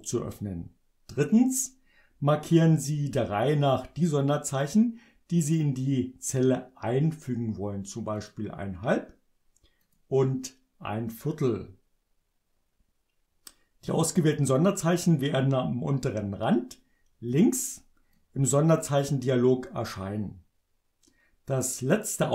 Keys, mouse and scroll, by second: 8.2 click, 9.8 click, 18.1 click.